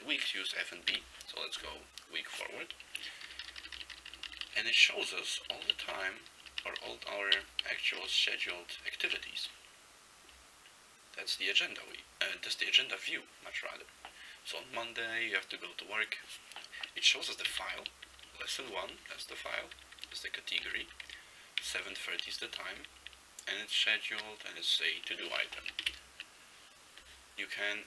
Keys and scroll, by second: 1.0 f, 3.4 ctrl+p, 3.5 ctrl+p, 3.7-4.0 ctrl+p, 4.1 ctrl+p, 4.4 ctrl+p, 4.5 ctrl+p, 5.4 ctrl+n, 5.6 ctrl+n, 5.8 ctrl+n, 6.0 ctrl+n, 6.5 ctrl+p, 6.7 ctrl+p, 6.8 ctrl+p, 7.4 ctrl+n, 8.0 ctrl+p, 8.5 ctrl+p, 17.6 ctrl+f, 17.8 ctrl+f, 18.1 ctrl+f, 18.3 ctrl+f, 18.5 ctrl+f, 18.7 ctrl+f, 18.9 ctrl+f, 19.1 ctrl+f, 19.3 ctrl+f, 19.5 ctrl+f, 19.7 ctrl+f, 20.0 ctrl+f, 20.1 ctrl+f, 20.7 ctrl+f, 20.9 ctrl+f, 21.1 ctrl+f, 21.7 ctrl+f, 22.0 ctrl+f, 22.2 ctrl+f, 22.6 ctrl+f, 22.7 ctrl+f, 22.9 ctrl+f, 23.3-23.9 ctrl+f, 24.0 ctrl+f, 25.9 shift+Right.